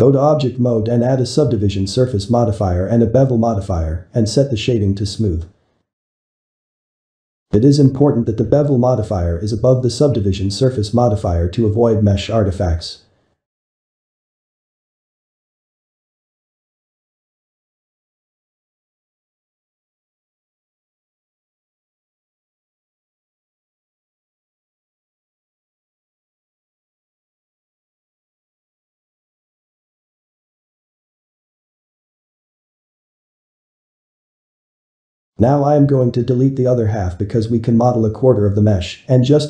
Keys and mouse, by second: 0.0 Tab, 0.4-1.4 ctrl+middle drag, 1.4 ctrl+2, 1.9-3.2 shift+middle drag, 3.2 click, 3.5 click, 4.0-4.8 drag, 5.2-9.3 drag, 9.3-12.4 middle drag, 13.4 click, 14.1-19.1 middle drag, 20.5-25.0 shift+middle drag, 25.0 click, 26.0-27.7 middle drag, 27.7 Tab, 28.2 shift+middle click, 30.8-37.2 ctrl+middle drag, 37.6 shift+middle click, 38.1 z, 38.9-39.4 ctrl+middle drag.